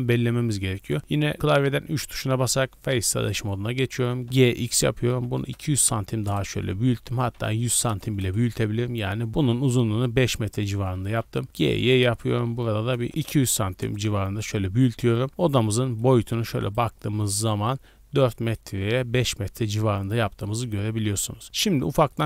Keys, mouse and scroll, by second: 3.2-3.7 right drag, 3.7 scroll down 2, 4.0 g, 4.2 x, 5.2 KP_2, 5.4 KP_0, 6.2 KP_Enter, 7.1 g, 7.3 x, 7.7 KP_1, 7.9 KP_0, 8.2 KP_Enter, 9.3 right click, 9.9-11.0 middle drag, 11.0 g, 11.2 y, 12.7 KP_2, 13.0 KP_0, 13.1 KP_Subtract, 13.1 KP_0, 13.8 KP_Enter, 14.6 scroll up 2, 15.3-15.7 scroll down 2, 15.6-16.6 middle drag, 17.0 middle click, 17.5 shift+middle click, 18.3 middle click, 19.4-19.8 middle drag, 19.8 scroll up 1, 20.4 shift+middle drag, 20.7-21.1 scroll up 2, 21.1-21.4 middle drag, 21.4 scroll down 2, 21.7-22.2 shift+middle drag.